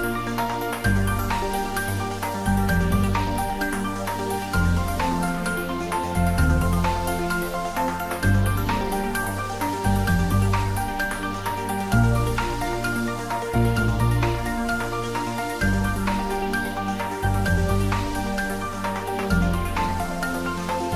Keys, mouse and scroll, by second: 4.6 click, 5.1 scroll down 1, 5.8-7.3 middle drag, 7.3 click, 8.0 scroll up 1, 10.8 scroll up 1, 12.6 click, 13.6-15.1 typing, 15.9 Tab, 17.5 3, 18.2 click, 20.2 middle click.